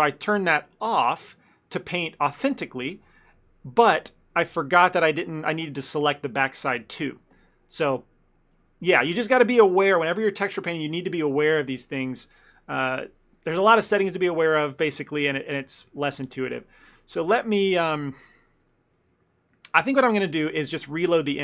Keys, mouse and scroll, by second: 0.9 click, 4.1 middle click, 8.6 click, 15.0 middle click, 15.3-16.7 shift+middle click, 15.5 ctrl+middle click, 15.9 middle click, 16.1 middle click, 16.2 shift+middle click, 16.3 middle click, 16.4 shift+middle click, 16.6 middle click, 17.0 ctrl+middle click, 17.4 middle click, 18.1 ctrl+middle click, 18.5 ctrl+middle click, 18.8 middle click, 19.0 middle click, 19.6 middle click, 20.7 click.